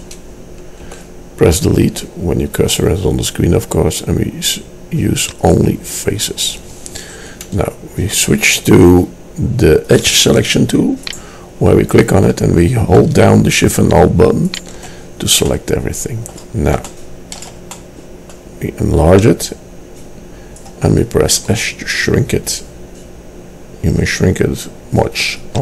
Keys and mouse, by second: 0.9 Delete, 9.9-11.2 middle drag, 11.8-12.9 middle drag, 19.2-20.6 drag, 21.4 s.